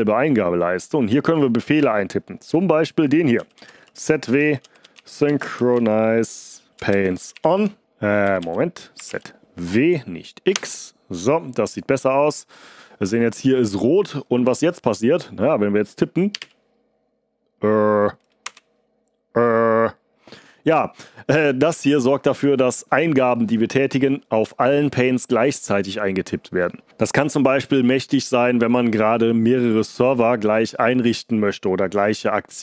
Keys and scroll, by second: 3.1-9.0 typing, 10.5 Return, 16.0-16.8 typing, 18.4 Return.